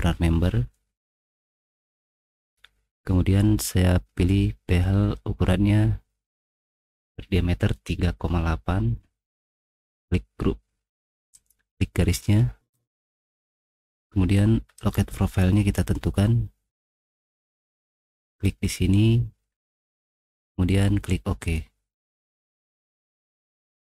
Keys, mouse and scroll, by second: 2.6-4.6 middle drag, 4.7-6.0 middle drag, 9.7 click, 9.9 click, 10.6 click, 11.3 click, 14.8 click, 16.2 middle click, 16.8-17.1 scroll down 2, 17.1 middle click, 18.3 middle click, 20.3 middle click, 21.4 click, 22.3 middle click, 22.3-22.9 scroll down 3, 22.6 middle click, 22.8 middle click, 23.0 middle click, 23.3 middle click.